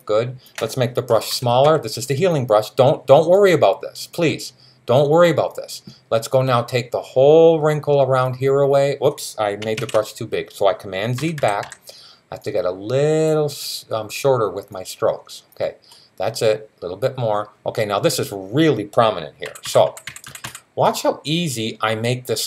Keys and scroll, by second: 0.9-1.4 typing, 9.6 super+z, 11.0 [, 11.2 [, 11.4 [, 19.2-20.2 typing.